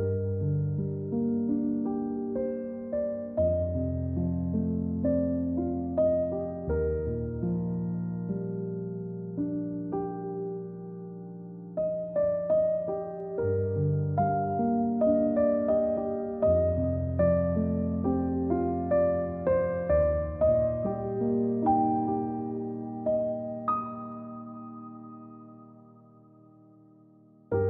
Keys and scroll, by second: 16.6 v, 17.5 g, 20.7 i, 24.5 v, 24.7 ctrl+z.